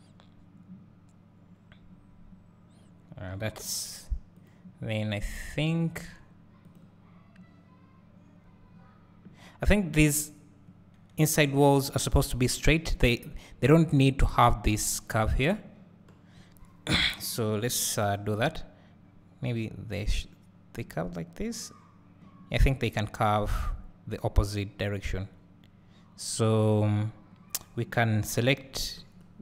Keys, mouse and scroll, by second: 0.3 scroll up 1, 6.0 Tab, 6.6 click, 8.7 scroll up 1, 25.7 scroll down 1, 26.3 scroll up 1, 29.2 c.